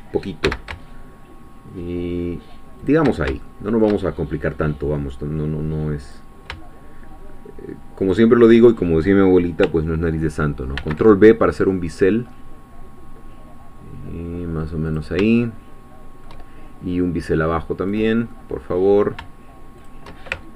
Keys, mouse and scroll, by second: 0.4 x, 2.8 shift+click, 3.4-5.3 shift+middle drag, 6.0 click, 8.1 shift+click, 10.8 ctrl+b, 12.2-12.6 scroll up 2, 12.6-14.9 scroll down 2, 14.9 click, 15.4-16.8 shift+middle drag, 18.0 click, 18.3 middle click, 19.8 shift+click.